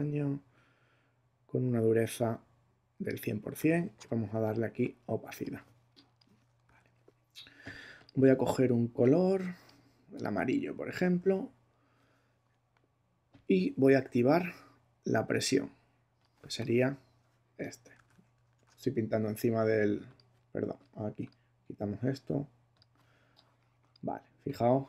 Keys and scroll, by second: 6.6 super+z, 17.9 super+z.